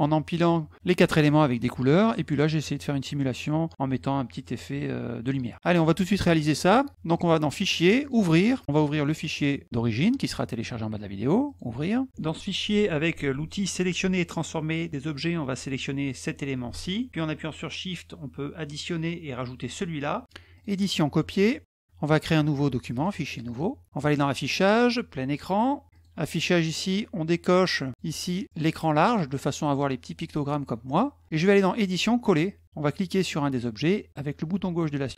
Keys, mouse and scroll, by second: 5.5 middle click, 7.1 click, 8.0 click, 9.1 click, 10.0 click, 11.4 click, 13.9 middle click, 15.7 click, 17.2 shift+click, 19.2 shift+click, 21.3 click, 22.7 click, 23.2 click, 23.8 click, 25.1 click, 27.2 click, 28.6 click, 31.2 click, 33.5-35.1 drag.